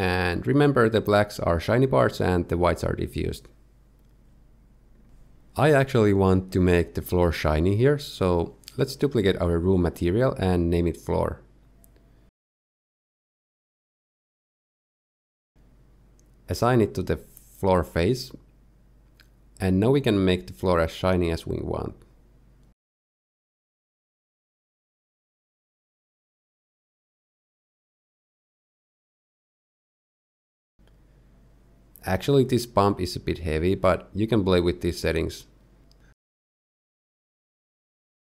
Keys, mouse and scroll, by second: 0.4 scroll up 1, 0.6 scroll down 1, 0.8 shift+middle click, 0.9 middle click, 1.0 shift+middle click, 1.7 click, 2.3 click, 2.5 click, 3.4 scroll down 1, 3.5 shift+middle click, 3.6 middle click, 3.7 shift+middle click, 3.8 middle click, 4.0 shift+middle click, 4.2 shift+middle click, 4.2 scroll down 1, 4.4 ctrl+shift+click, 4.6 middle click, 5.0 shift+middle click, 7.2 click, 8.5 click, 9.2 click, 10.6 click, 11.2 click, 12.5 o, 14.2 z, 14.7-15.0 scroll down 1, 15.0 z, 15.3 Tab, 15.7-16.0 scroll down 1, 16.0 middle click, 16.5 click, 17.7 click, 19.1 click, 20.1 middle click, 21.0-21.5 scroll up 2, 22.3 Tab, 22.8 scroll down 1, 22.9 shift+middle click, 23.0-23.3 scroll up 2, 23.3 ctrl+shift+click, 23.6 click, 24.7-25.2 scroll down 2, 24.9 shift+middle click, 25.2 ctrl+shift+click, 25.4 middle click, 25.8 middle click, 26.2 click, 26.6 click, 27.8 middle click, 28.0 scroll up 1, 28.1 middle click, 28.3 scroll down 1, 28.4 shift+s, 28.7 shift+a, 29.2 Tab, 29.2 g, 29.4 Tab, 29.6 s, 29.7 right click, 29.8 click, 30.0 click, 30.0 click, 30.4 middle click, 30.5 scroll up 1, 30.7 middle click, 32.7 click, 34.4 shift+middle click, 35.0-35.4 scroll up 2, 35.4 shift+middle click, 36.1 click, 37.0 click, 37.8 scroll up 1, 37.8 middle click, 38.1 middle click, 38.2 scroll down 2.